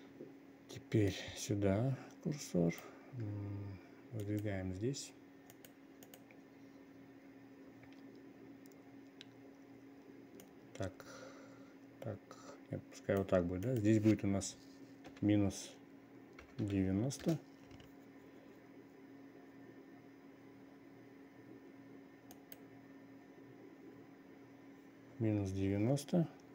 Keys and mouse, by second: 1.6-3.3 drag, 4.9 click, 6.1 click, 6.5 click, 11.1-13.7 drag, 14.1-17.8 drag, 22.9 click.